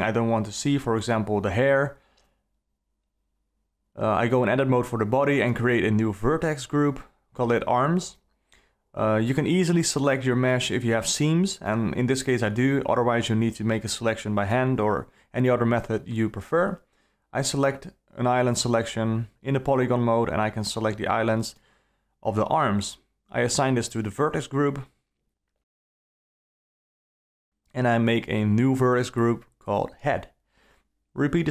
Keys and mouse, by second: 2.4 Tab, 3.4 alt+a, 4.5 click, 6.5 click, 7.3-11.5 drag, 9.9 BackSpace, 10.0 BackSpace, 13.1 2, 13.4 click, 13.8-15.2 alt+middle drag, 15.2 alt+click, 15.2 alt+right click, 15.3 alt+middle click, 15.5 alt+click, 15.5 alt+right click, 15.7 alt+middle click, 16.8 middle click, 17.1 alt+middle click, 17.9 alt+a, 20.2 3, 21.7 l, 23.6 l, 25.0 click, 27.3 alt+a, 28.4 click, 29.1 click, 29.4-31.5 drag.